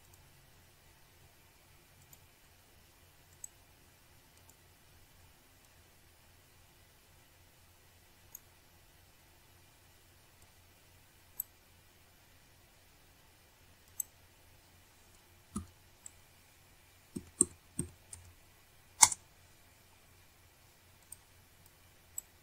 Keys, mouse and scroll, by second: 0.0 click, 2.9 click, 4.0 click, 5.0 right click, 5.7 click, 7.6 click, 10.4 click, 12.2 click, 14.1 ctrl+click, 15.3 click, 17.6 click, 22.1 click.